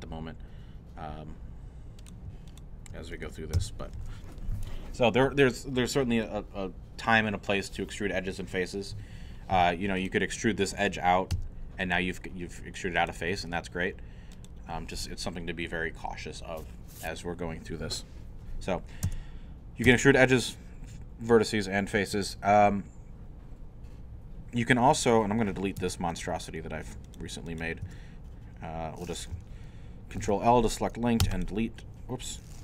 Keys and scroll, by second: 3.5 shift+f, 11.3 e, 13.4 e, 19.0 Tab, 19.9 Tab, 25.8 Tab, 27.8 Tab, 30.2 ctrl+l, 31.2 ctrl+x.